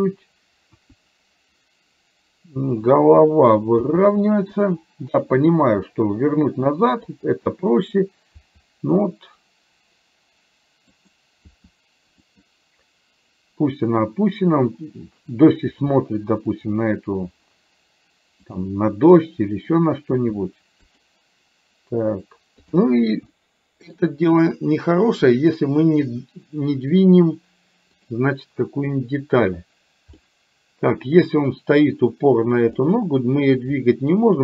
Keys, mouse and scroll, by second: 0.7 KP_1, 2.9 click, 4.0 r, 5.5-6.7 middle drag, 7.1 KP_3, 8.5 r, 15.9 r, 18.6 click, 20.1 r, 22.6 click, 23.5 shift+middle click, 30.2-31.9 middle drag, 32.9 middle click.